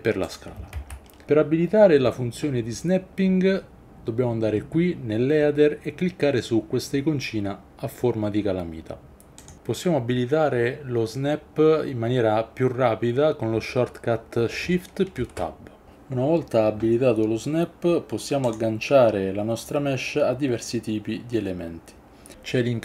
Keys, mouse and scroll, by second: 0.3 click, 0.8 ctrl+z, 1.3 ctrl+z, 9.4-14.6 drag, 15.2 shift+Tab, 18.5-22.8 drag.